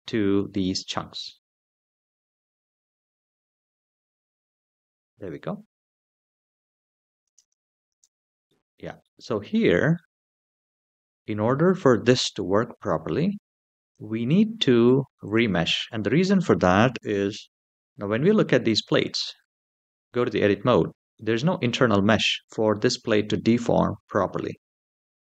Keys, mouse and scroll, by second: 3.0 click, 7.0 space, 7.7 space, 8.2-8.8 middle drag, 9.2 scroll up 2, 9.7-11.7 middle drag, 13.6 click, 15.0 click, 17.5 Tab, 17.8-18.2 scroll down 1, 18.6 Tab, 20.9-25.0 middle drag.